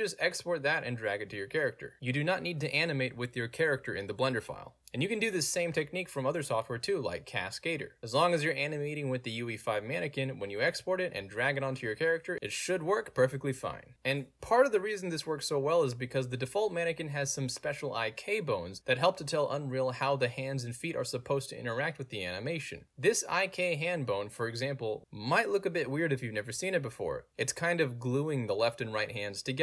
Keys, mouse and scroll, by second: 0.1-2.3 drag, 2.3 scroll up 1, 2.4 click, 3.3 scroll down 1, 3.3 click, 4.7-6.7 drag, 7.1-9.5 drag, 10.1 space, 10.2 click, 10.4 middle click, 10.4-11.0 scroll down 1, 11.0 click, 12.4-17.0 alt+drag, 17.0 alt+middle click, 17.5 click, 18.1 alt+right drag, 18.4-18.9 alt+drag, 19.4-25.4 drag, 25.7 ctrl+z, 26.1 alt+middle click, 26.1-29.6 drag.